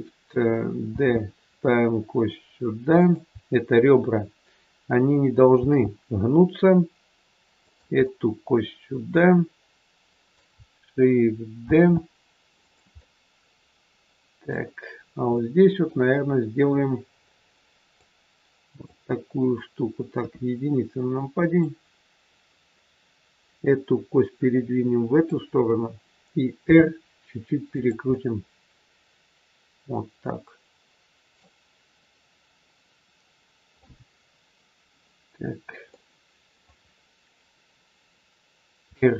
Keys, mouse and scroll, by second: 0.8 shift+d, 5.5 shift+d, 8.1 middle click, 11.6 shift+d, 12.8 middle click, 15.2 middle click, 18.0 click, 20.1 KP_1, 21.5 click, 26.6 r, 27.9 middle click, 33.7 middle click, 35.8 middle click, 38.7 r.